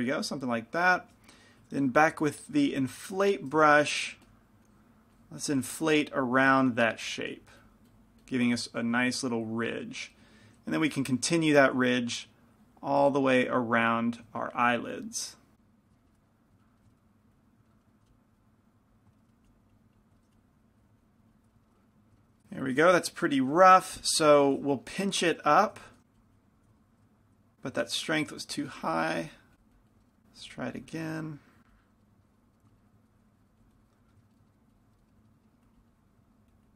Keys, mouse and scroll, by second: 2.4 i, 2.4 f, 3.5 f, 4.4 f, 4.9-9.0 drag, 4.9 middle click, 9.0-10.9 middle drag, 9.2-10.9 drag, 11.9 middle click, 12.1 middle click, 12.8-14.7 drag, 14.8-16.3 drag, 16.7 middle click, 16.9 middle click, 17.3 click, 17.8 right click, 18.0 middle click, 18.1 f, 18.4-20.3 drag, 18.4 middle click, 19.2 right click, 19.4 middle click, 19.5 f, 20.4 f, 20.9 click, 22.1 middle click, 24.2 p, 24.2 f, 26.2-27.2 drag, 27.0 ctrl+z, 27.2 ctrl+z, 28.1 shift+f, 29.5-32.3 drag, 32.8 middle click, 33.3 click, 33.3 right click, 34.9-36.7 drag, 35.5 middle click, 35.8 right click.